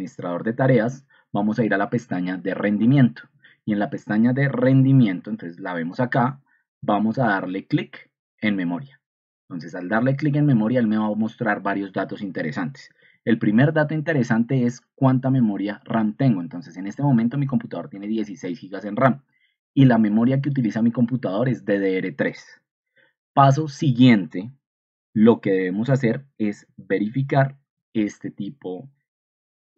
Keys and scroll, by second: 4.6 ctrl+2, 9.8 Escape, 13.1 ctrl+2.